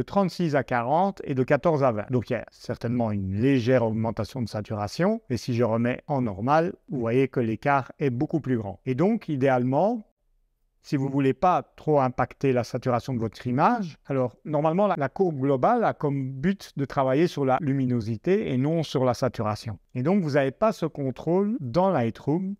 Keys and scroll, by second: 21.6 super+Tab.